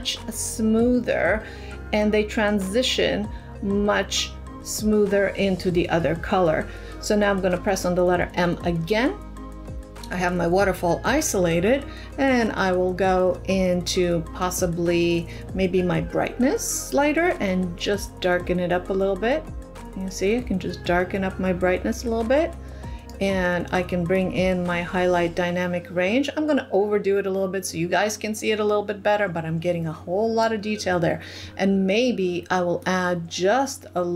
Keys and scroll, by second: 8.7 m.